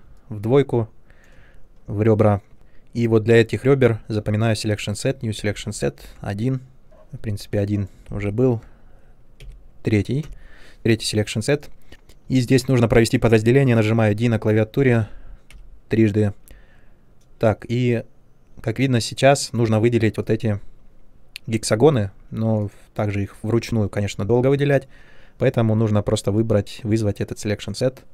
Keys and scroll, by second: 14.1 d, 14.9 d, 15.5 d.